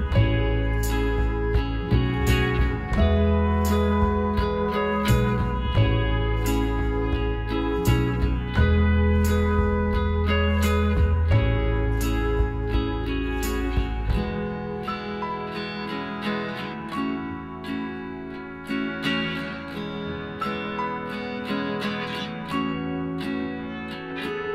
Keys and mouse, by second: 0.5 z, 1.8-3.4 right drag, 2.7 b, 3.9 middle click, 5.3-7.8 drag, 8.3 e, 10.1-11.8 right drag, 11.2 l, 12.2-14.1 drag, 14.5-16.9 middle drag, 15.4-17.1 right drag, 16.2 b, 17.9-19.8 drag, 18.8 middle click, 19.0 right click, 19.8-22.7 middle drag, 20.7 z, 23.8 KP_1.